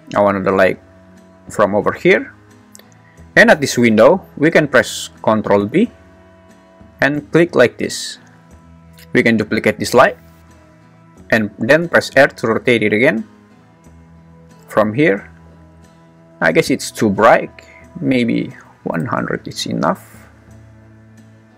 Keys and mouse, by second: 0.0 click, 5.6 ctrl+b, 8.8 `, 9.6 shift+d, 10.7 Escape, 11.9 r, 18.0 click, 18.6 0.